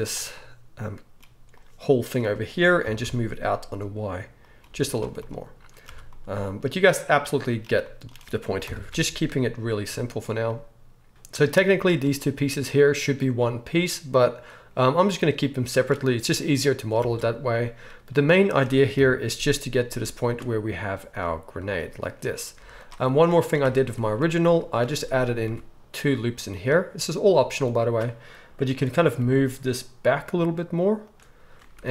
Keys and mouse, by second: 1.7-4.6 middle drag, 4.6-6.5 drag, 4.6 g, 4.6 z, 5.9 Tab, 6.5 middle click, 6.6-7.5 right drag, 7.5-9.6 drag, 8.6 KP_1, 8.9 alt+a, 9.6-14.3 shift+middle drag, 12.8 shift+click, 12.8 shift+right click, 14.3 right drag, 14.5 middle click, 14.7-21.9 right drag, 17.0 alt+a, 18.9 KP_1, 20.0 z, 20.8 z, 21.9-24.9 shift+middle drag, 22.5 z, 23.6 Tab, 24.4 z, 24.9-31.9 drag, 25.4 ctrl+r, 27.3-31.1 middle drag, 27.3 right click, 29.2 g, 31.8 ctrl+r.